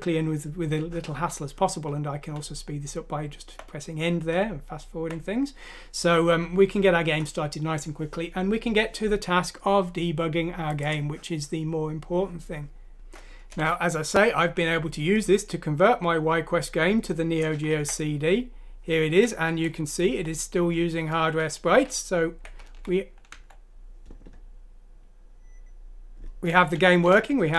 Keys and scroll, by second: 2.3 End, 2.8 End, 2.9 End, 12.9 F6, 13.4 Return, 14.4 End, 14.9 End, 14.9 End, 15.0 End, 17.2 End, 17.4-19.9 typing, 21.1 Tab, 21.6-23.7 typing, 27.1 Left.